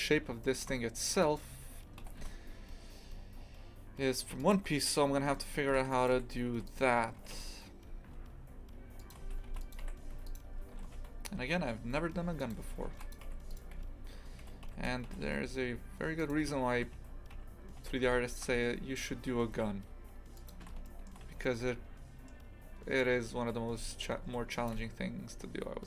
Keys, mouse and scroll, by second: 0.4 shift+middle click, 1.2 right click, 2.0 g, 5.8 ctrl+r, 6.5 1, 6.7 right click, 7.2 g, 9.5 ctrl+r, 10.1 a, 10.3 right click, 10.7 g, 12.9 ctrl+r, 13.5 right click, 13.8 a, 14.6 Escape, 15.1 g, 16.2 right click, 16.8 g, 20.9-23.7 shift+middle drag, 23.7 a, 24.2 ctrl+r.